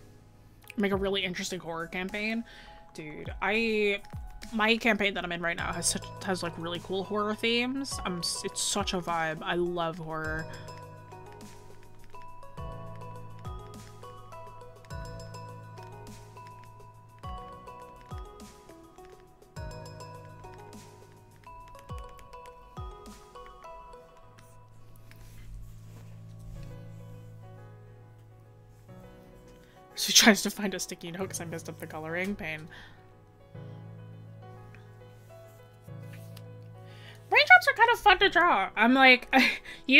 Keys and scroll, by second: 4.3 scroll, 4.8 scroll up 1, 21.8 scroll down 1.